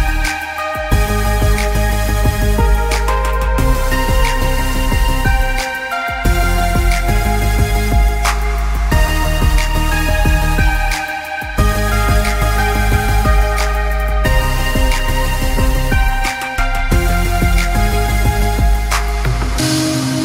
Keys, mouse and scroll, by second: 1.9 Escape, 2.1 click, 2.6 Escape, 2.9 click, 3.1 Escape, 3.3 click, 4.1 alt+Num_Lock, 4.1 alt+scroll up 1, 4.2 click, 4.7 scroll down 1, 5.0 click, 5.4 Escape, 5.5 scroll down 1, 5.7 click, 6.1 alt+scroll up 2, 12.0 click, 12.3 click, 12.6 click, 12.7 alt+scroll up 2, 12.9 scroll down 1, 13.1 scroll up 1, 13.2 Escape, 13.3 click, 14.4 alt+scroll, 14.5 scroll up 1, 14.6 click, 15.0 click, 15.5-16.0 scroll down 2, 15.6 click, 16.0 click, 16.2 ctrl+s, 16.7 click, 16.8 alt+scroll up 2, 17.6 scroll up 1, 17.8 click, 18.8 click.